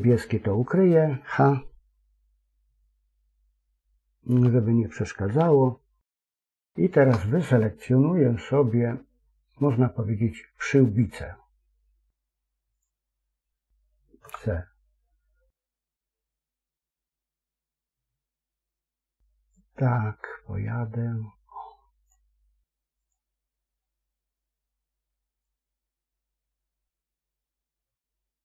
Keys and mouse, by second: 0.6 middle click, 4.2 h, 5.3 KP_3, 6.4 shift+middle click, 12.6 click, 14.1 c.